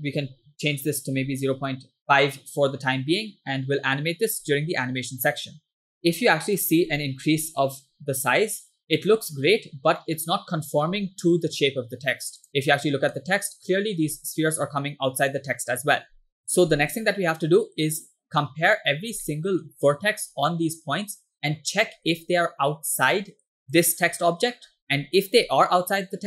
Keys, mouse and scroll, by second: 3.0-4.7 scroll down 2, 5.9 middle click, 6.0 scroll up 2, 6.6-7.7 drag, 8.6 scroll down 2, 9.3 shift+middle drag, 9.6 scroll up 2, 10.1-11.0 middle drag, 12.5 click, 13.2 middle click, 17.2-18.8 middle drag, 18.9 scroll up 1, 19.3 shift+middle click, 23.7 drag, 24.6-25.0 scroll down 3, 25.0-25.5 scroll up 2, 25.6-26.0 scroll down 1.